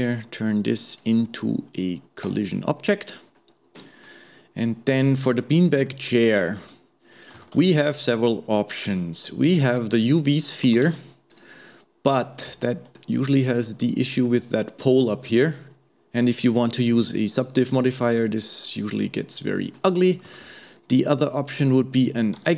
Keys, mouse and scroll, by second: 0.9 click, 2.2 click, 2.8-3.4 scroll up 2, 3.4-4.5 middle drag, 4.5-5.2 scroll up 1, 5.2-5.5 scroll up 1, 5.5-5.9 scroll down 1, 5.9-6.9 middle drag, 6.9-7.5 scroll down 1, 7.5 shift+a, 11.7 middle click, 12.3-13.0 scroll up 1, 13.0-15.9 middle drag, 18.6-20.0 middle drag, 20.0 scroll down 2, 20.3 shift+a, 22.4 g.